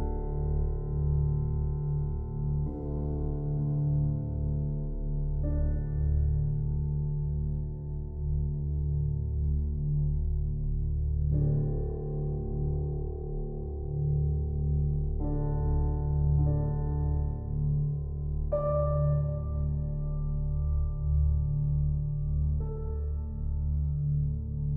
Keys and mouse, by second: 0.2 click, 3.1 click, 3.8 click, 7.2 click, 9.6 click, 11.1 g, 12.9 x, 13.5 click, 16.5 s, 17.4 click, 18.5-18.9 typing, 20.8 click, 21.6 typing, 22.2 click.